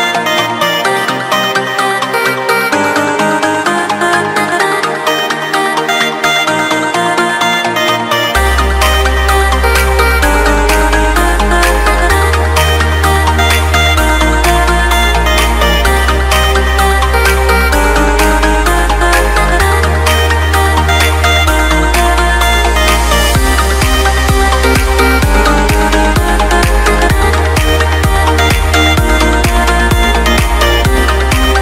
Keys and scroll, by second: 0.6 Escape, 19.7 alt+7, 27.3 alt+a, 29.8 Escape.